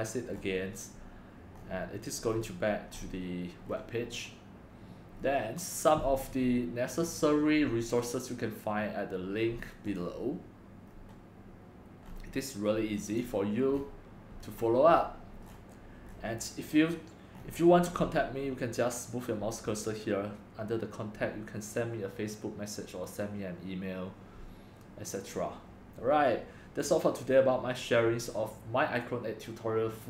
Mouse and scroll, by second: 0.4 middle click, 0.4 scroll, 0.4-1.6 scroll down 5, 1.6 middle click, 1.6 scroll, 1.6-2.3 scroll up 4, 2.3 middle click, 2.3 scroll, 2.3-3.0 scroll down 2, 3.0-3.7 scroll up 5, 3.7 middle click, 3.7 scroll, 3.7-5.2 scroll down 3, 5.2 middle click, 5.2 scroll, 5.2-5.9 scroll down 3, 5.9 scroll down 1, 6.0-9.9 scroll up 2, 9.9 scroll up 1, 10.0 click, 10.9-13.2 middle drag, 10.9-12.1 scroll, 12.1-13.1 scroll, 13.2 click, 13.8-14.9 middle drag, 13.8-14.2 scroll, 14.6-14.9 scroll, 14.9 scroll up 10, 15.0 middle click, 15.0 scroll, 15.3 scroll up 5, 15.5-17.4 scroll down 10, 17.4-18.4 scroll up 4, 18.4-22.2 scroll up 1, 22.2-26.9 scroll up 1, 26.9 scroll up 1, 27.0-30.0 drag.